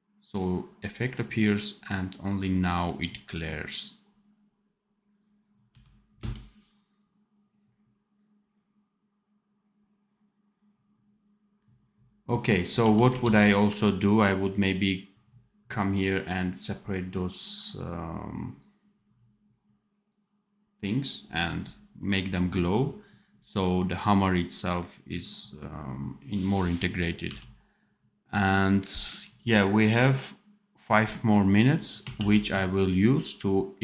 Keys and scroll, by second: 5.6 d, 6.1 space, 12.7 d, 13.2 ctrl+s, 27.1 d, 32.1 ctrl+s.